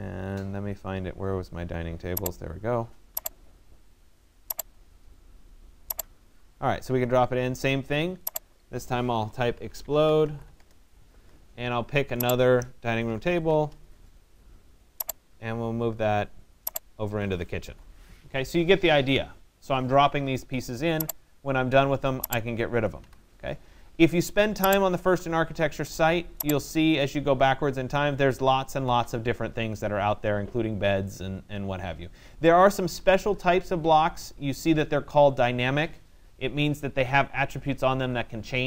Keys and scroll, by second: 8.8 e, 10.6 Return, 13.3 c, 13.6 Return, 17.2 Escape, 22.6 Delete.